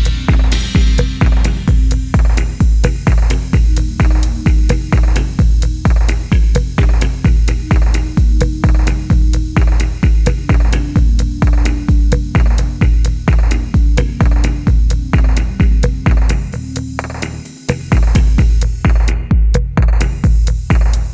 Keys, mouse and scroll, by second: 0.5 typing, 2.7-3.9 typing, 7.3 double click, 8.0 F1, 8.3 middle click, 14.3 ctrl+z, 19.4 double click.